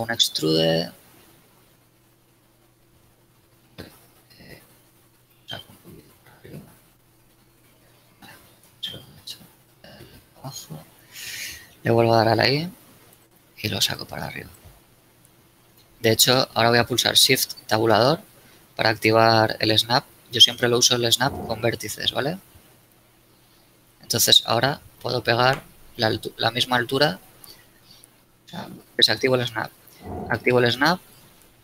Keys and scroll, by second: 0.5 e, 4.4 g, 4.7 z, 7.4 ctrl+z, 12.4 i, 18.0 shift+Tab, 28.4 shift+Tab, 30.4 shift+Tab.